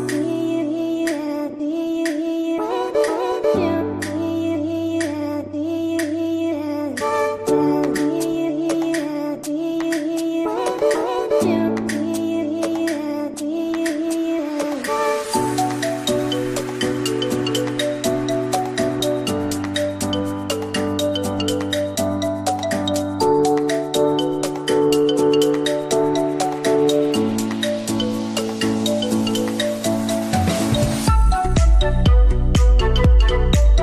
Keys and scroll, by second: 15.0 shift+Page_Down, 20.7 t, 20.9 r, 21.3 Escape, 25.9 c, 26.4 Escape, 26.6 F2.